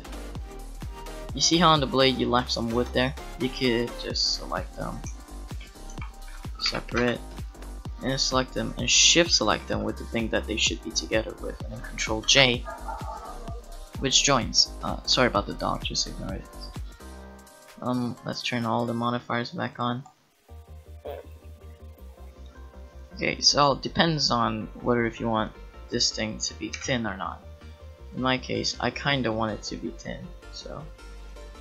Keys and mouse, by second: 0.7 ctrl+j, 2.8 Tab, 5.9 g, 6.7 p, 7.0 Tab, 8.1 click, 12.2 ctrl+j, 12.8 right click, 17.0-18.1 middle drag, 20.1-21.9 middle drag, 20.3 click, 20.3 right click, 23.8-26.0 middle drag, 26.7 KP_Decimal, 28.1 middle click, 29.9-31.6 middle drag.